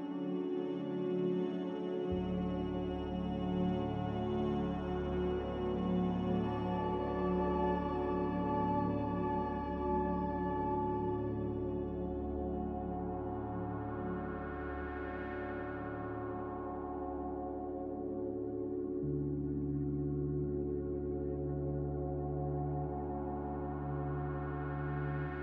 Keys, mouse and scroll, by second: 7.5 b, 9.7 Delete, 15.2 Escape, 15.9 Delete, 17.6 m, 24.5 b.